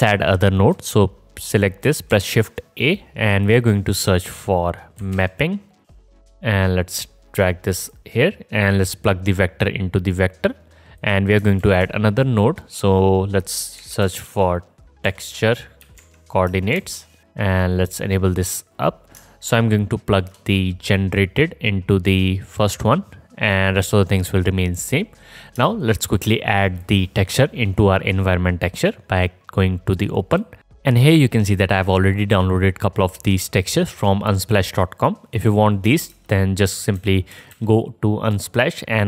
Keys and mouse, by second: 0.8 middle click, 0.9 click, 2.3 shift+a, 5.8 p, 7.2 click, 9.1-11.3 middle drag, 11.8 shift+a, 19.8-21.5 alt+shift+right drag, 26.5 alt+shift+middle click, 36.3-37.5 middle drag.